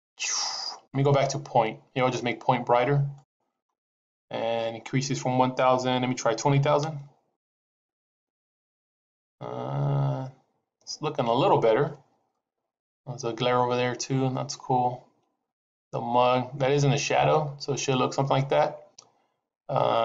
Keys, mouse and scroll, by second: 0.8 click, 3.1 click, 7.5 KP_0.